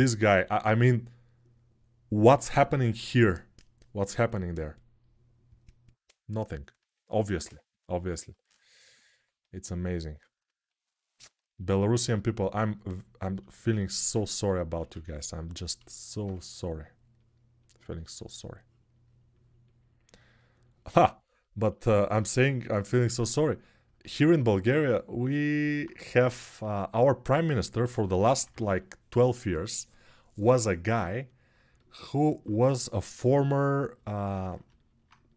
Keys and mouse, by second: 8.7-13.2 alt+drag, 13.2-15.3 alt+shift+right drag, 14.1 alt+q, 14.5 1, 15.3-34.8 ctrl+alt+shift+drag, 15.7 alt+shift+middle click, 27.6-28.4 typing, 32.6 g, 34.8-35.3 right drag.